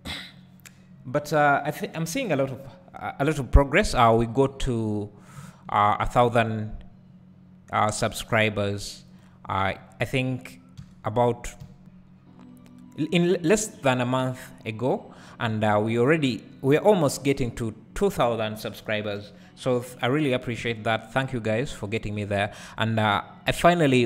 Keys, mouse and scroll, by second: 4.1 click, 4.4 scroll up 1, 6.0 ctrl+r, 9.2 click, 9.7-10.8 scroll up 1, 10.8 g, 13.7 click, 15.5 3, 16.0-20.1 drag, 21.3 click, 22.0-22.5 scroll down 1, 22.5 Tab, 23.6-24.0 drag.